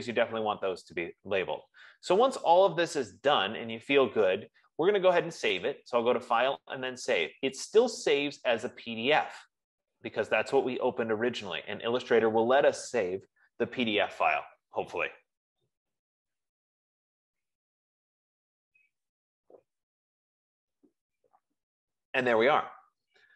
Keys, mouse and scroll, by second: 6.2 click, 7.9 click.